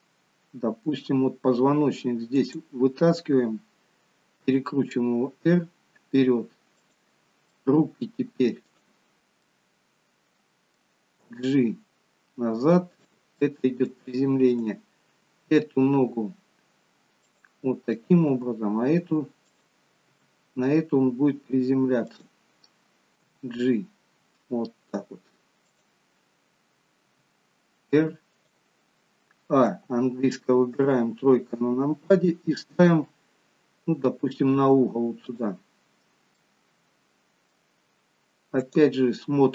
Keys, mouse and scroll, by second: 2.5 click, 4.8 r, 7.8 middle click, 8.8 click, 9.5 middle click, 11.6 g, 13.6 middle click, 14.7 click, 15.2 g, 18.0 click, 18.6 g, 20.3 r, 23.4 g, 27.1 r, 29.9 a, 31.0 KP_3, 33.2 g, 36.6 middle click, 38.8 click.